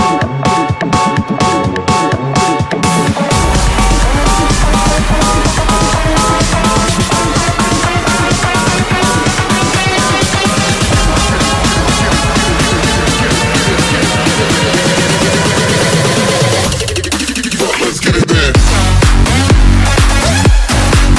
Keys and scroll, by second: 2.2 ], 2.7 ], 5.6-7.4 typing, 12.3 typing, 18.3 ], 19.5-21.1 typing.